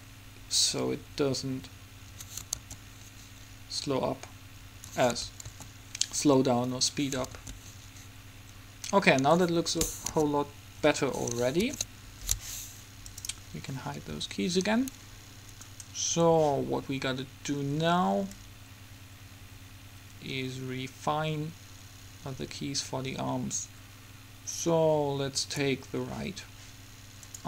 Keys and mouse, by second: 2.3 Escape, 2.7 alt+a, 4.9 Escape, 5.7 alt+a, 6.9 Escape, 7.5 alt+a, 9.2 Escape, 10.2 KP_3, 14.2 a, 15.8-17.7 right drag, 18.5-19.9 drag.